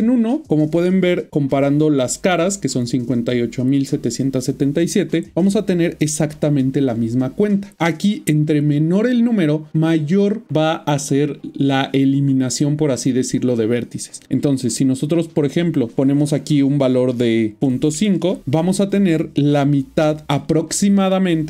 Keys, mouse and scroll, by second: 5.6 click, 15.4 click, 17.6 typing.